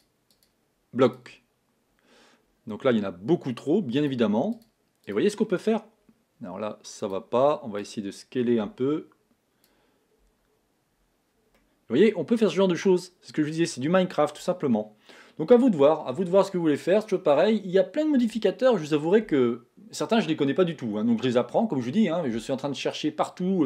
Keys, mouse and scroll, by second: 0.7 click, 4.3 click, 7.4 click, 8.2 click, 11.9-15.0 middle drag, 16.8-17.2 scroll down 2, 17.2-18.2 scroll up 2.